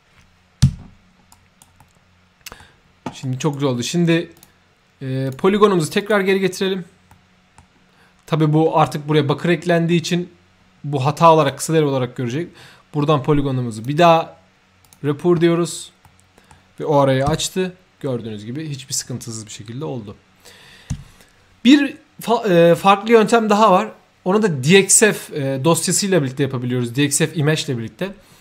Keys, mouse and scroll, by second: 0.7 2, 1.3-1.6 right drag, 1.8-2.6 middle drag, 3.2 right click, 4.3 click, 5.2 click, 6.0 click, 7.1 middle click, 9.5-10.3 middle drag, 11.4 click, 13.7 click, 14.8 click, 16.0 middle click.